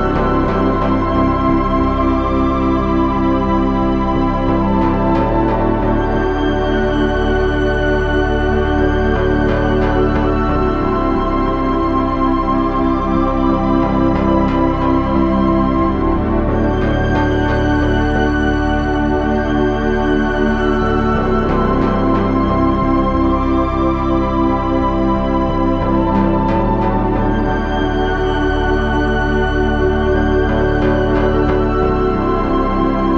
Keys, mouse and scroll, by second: 0.0 z, 0.8 KP_1, 1.4 Tab, 4.7 KP_3, 4.9 z, 8.2 Tab, 9.1 c, 11.8 c, 13.8 c, 15.6 z, 15.8 Tab, 26.4 KP_3, 26.6 z, 28.1 KP_7, 32.0 shift+a.